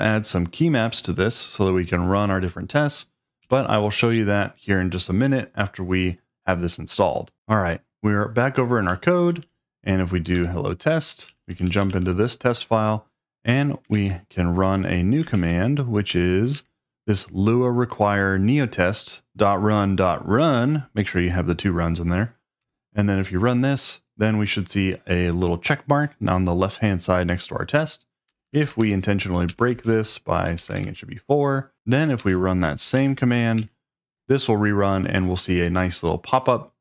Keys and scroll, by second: 3.4 j, 8.9-9.4 typing, 10.3 Return, 11.0-11.9 typing, 13.9 shift+;, 15.3 shift+super+v, 16.5 Return, 22.6 Return, 28.3-32.2 typing, 31.7 Escape, 32.9 super+v, 33.6 Return, 34.1-34.8 typing.